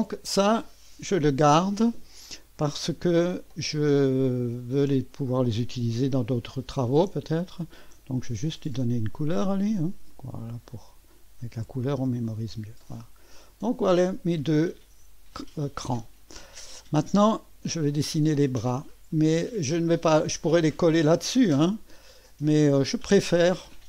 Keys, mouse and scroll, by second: 3.1 click, 4.3-5.6 drag, 7.8 ctrl+d, 9.0 click, 10.1-11.5 drag, 11.8 click, 12.7 click, 13.1 click, 14.1 click, 15.5-16.7 drag, 18.0 click, 20.7-21.7 drag.